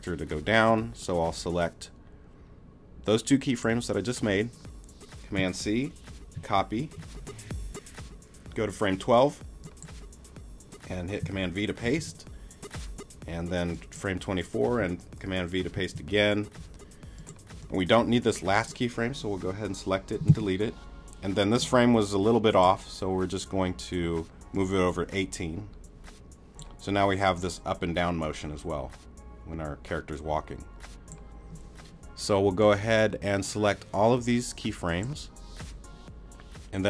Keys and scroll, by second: 6.3 super+c, 11.8 super+v, 15.7 super+v, 20.3 BackSpace.